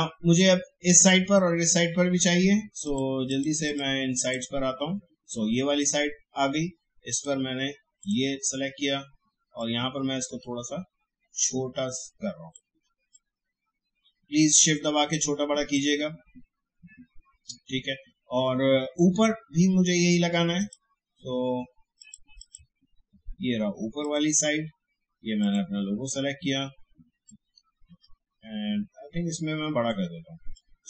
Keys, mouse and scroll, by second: 2.8 click, 7.1-13.1 drag, 13.1-18.2 drag, 27.0-30.8 drag.